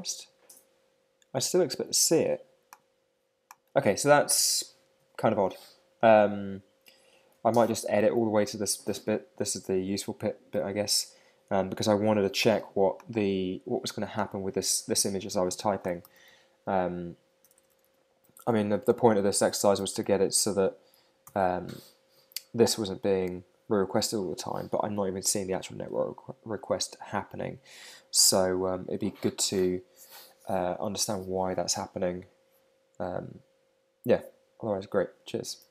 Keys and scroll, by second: 19.4 shift+Left, 21.2 shift+..